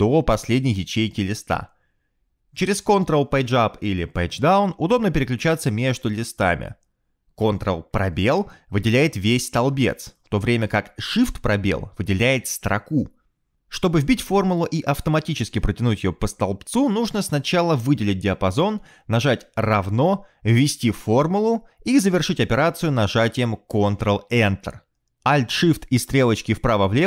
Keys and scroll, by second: 0.4 ctrl+shift+Home, 4.5 ctrl+Page_Up, 5.2 ctrl+Page_Down, 7.1 ctrl+Page_Up, 7.3 ctrl+Page_Down, 10.0 ctrl+space, 18.2 =, 20.4-22.1 typing, 23.4 ctrl+Return, 26.9 alt+shift+Right.